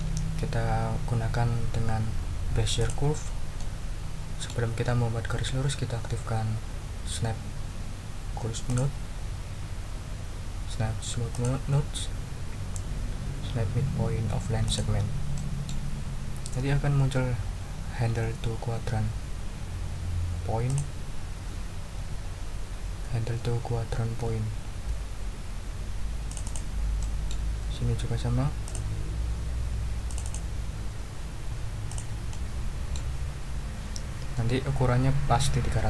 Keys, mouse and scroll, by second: 2.8 click, 3.6-4.6 drag, 8.6 click, 11.3 click, 14.6 click, 15.3 middle click, 20.7 click, 26.3 click, 27.0 middle click, 28.6 click, 30.1 click, 31.9 click, 32.3 click.